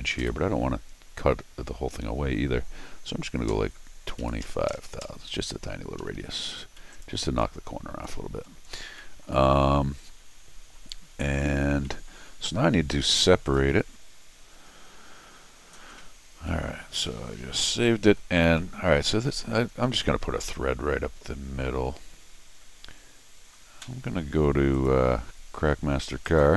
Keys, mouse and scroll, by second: 0.2 u, 6.0 Escape, 6.1 Escape, 6.7 middle click, 6.9 right click, 7.2 scroll up 1, 8.1 middle click, 8.7 scroll down 1, 9.0 middle click, 9.6-10.5 scroll up 1, 11.7 scroll down 1, 11.8 middle click, 12.5 scroll down 2, 12.7 scroll up 2, 13.4 click, 13.6 s, 16.5 middle click, 16.9 scroll up 2, 17.1 middle click, 17.6 middle click, 18.6 middle click, 19.8 middle click, 24.7 click, 26.2 click.